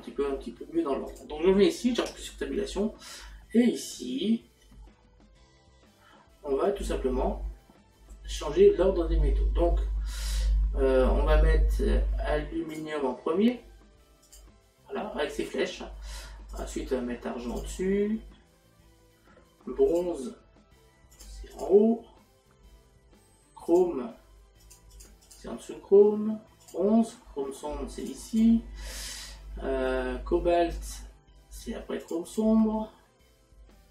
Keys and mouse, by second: 1.1 click, 12.8 click, 14.3 click, 16.6 click, 20.0 click, 21.2 click, 23.7 click, 26.7 click, 30.8 click, 32.1 click.